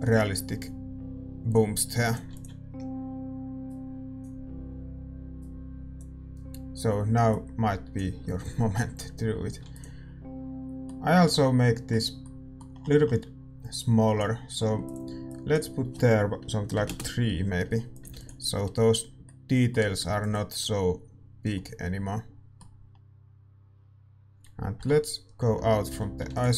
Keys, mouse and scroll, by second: 0.9 ctrl+s, 2.2-9.2 drag, 4.3 ctrl+s, 10.6 ctrl+s, 10.6-16.9 middle drag, 18.0-19.5 drag, 18.6 ctrl+s, 20.2 ctrl+s, 24.9 KP_Divide.